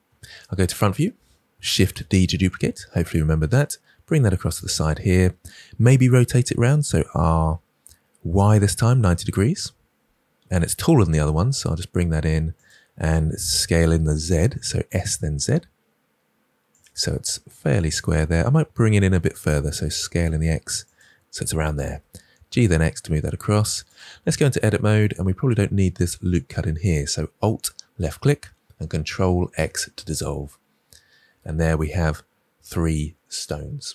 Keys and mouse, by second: 0.0 KP_1, 1.8 shift+d, 4.5-4.9 drag, 6.9 r, 8.3 y, 8.9 9, 9.0 0, 9.5 Return, 10.7 g, 12.5 click, 13.4 s, 14.1 z, 16.6 click, 17.0 g, 17.8-19.0 drag, 19.0 s, 19.4 x, 20.8-21.8 drag, 21.8 g, 22.5 x, 24.2 Tab, 26.4 alt+click, 29.4 ctrl+x, 31.2 Tab.